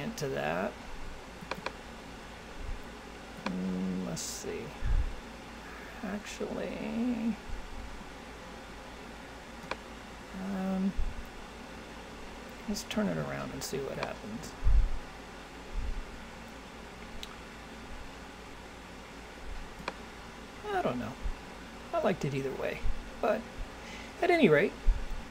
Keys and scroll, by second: 13.0 super+z.